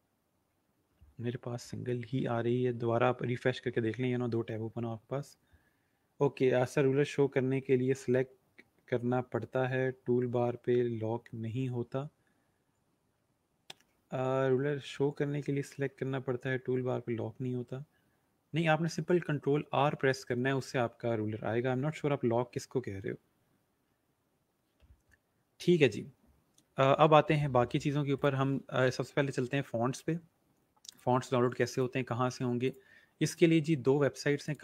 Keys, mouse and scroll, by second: 28.2 click, 30.8 click.